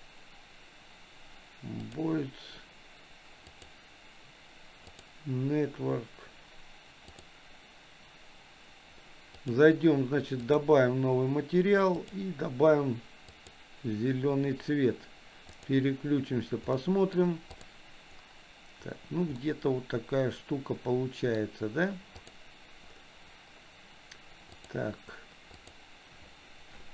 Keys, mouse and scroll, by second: 3.6-5.1 drag, 9.3 click, 10.5 click, 12.0 click, 15.8 click, 16.8 middle click, 17.6 click, 19.4-21.4 middle drag, 22.2 click, 24.6 click, 25.6 click.